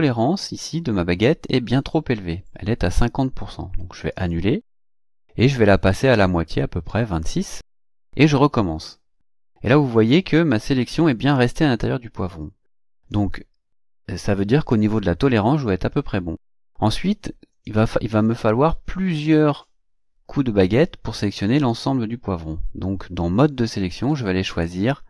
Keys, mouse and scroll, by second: 4.1 click, 5.6 click, 8.8 click, 24.6 click.